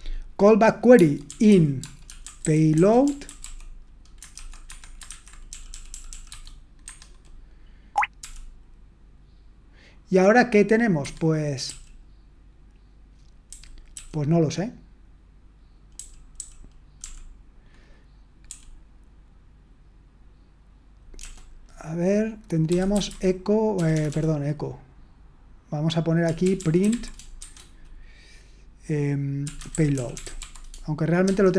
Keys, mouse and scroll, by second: 2.0-6.3 typing, 4.7 Escape, 6.8 Escape, 11.6 k, 22.8-23.5 typing, 26.5-27.4 typing, 29.9-31.2 typing.